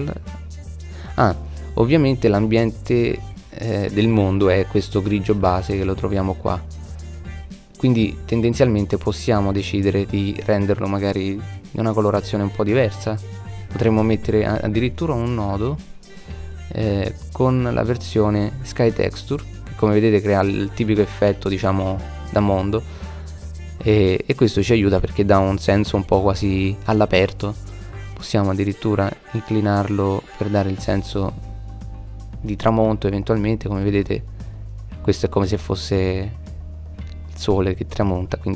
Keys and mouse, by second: 1.4 middle click, 4.3-8.7 drag, 9.3-13.4 middle drag, 17.3-18.5 middle drag, 18.8 middle click, 21.0-22.2 middle drag, 24.2-24.7 middle drag, 27.5-27.9 drag, 32.8-33.8 middle drag, 34.6 middle click, 35.4 middle click, 35.9 middle click.